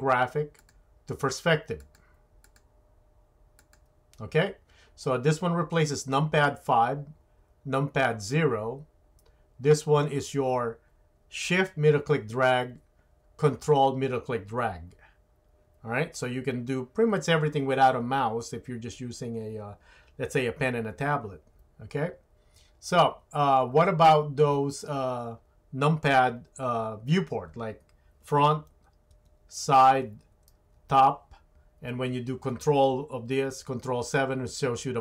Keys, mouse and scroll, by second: 29.9 KP_3, 30.8 KP_7, 34.3 ctrl+KP_7.